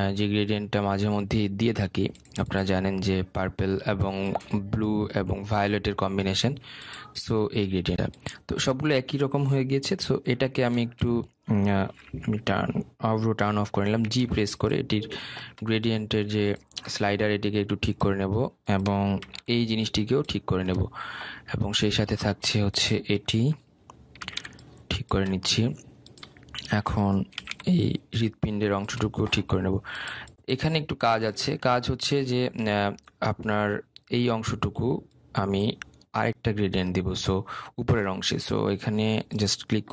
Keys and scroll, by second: 14.9 g.